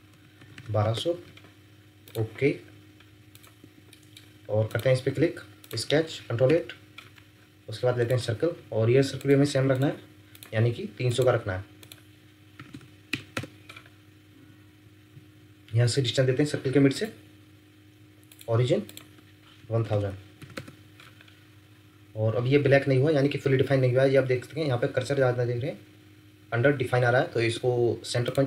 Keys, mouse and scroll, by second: 0.0-0.5 typing, 0.8 Return, 3.6 Escape, 3.9 middle click, 6.5 ctrl+8, 12.5-13.1 typing, 13.3 Return, 19.6-20.4 typing, 20.5 Return, 27.3 Escape, 27.5 Escape, 27.7 Escape.